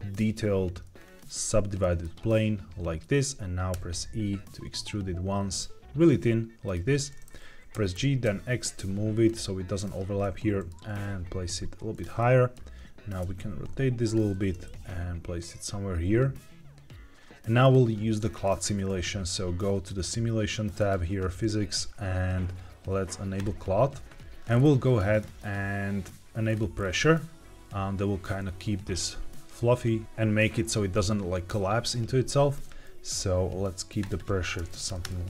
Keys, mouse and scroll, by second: 0.9 scroll up 2, 1.7 middle click, 1.7 scroll up 1, 2.1-2.7 scroll down 1, 3.6 e, 6.6 click, 6.8 Tab, 7.6 g, 7.9 y, 8.2 x, 9.2 click, 10.1-10.6 middle drag, 10.9 g, 10.9 z, 11.9 drag, 12.1-12.5 middle drag, 13.1 r, 13.3 z, 14.0 click, 14.2 g, 14.6 shift+z, 17.5 click, 18.3 middle click, 20.7 click, 23.3-24.2 drag, 24.3 scroll down 2, 25.1-26.4 scroll down 2, 26.4 click, 26.5 scroll up 1, 26.7-27.6 scroll down 1, 33.9-35.0 drag.